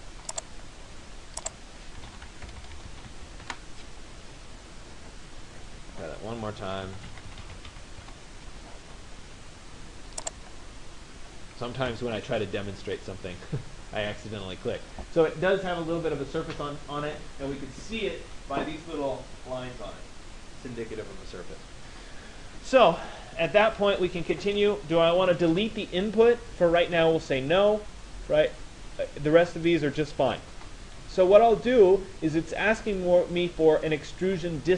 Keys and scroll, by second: 2.4 BackSpace, 3.4 Return, 7.6 Return.